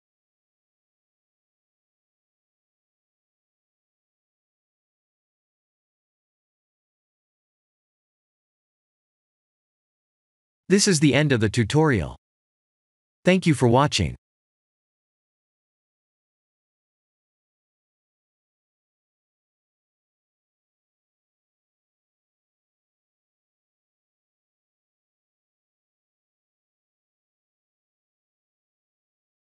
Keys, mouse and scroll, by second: 4.2 click, 5.6 click, 6.7 click.